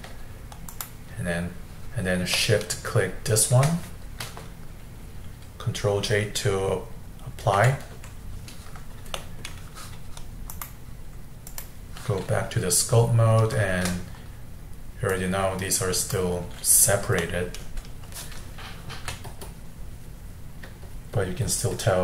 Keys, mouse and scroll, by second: 0.7 shift+click, 2.4-5.5 shift+middle drag, 7.6 ctrl+j, 9.1-10.5 middle drag, 10.5-13.3 drag, 13.3-15.1 scroll up 2, 15.1-17.2 drag, 17.2 middle click, 17.8-19.0 scroll up 2, 19.0 f, 19.5-22.0 drag.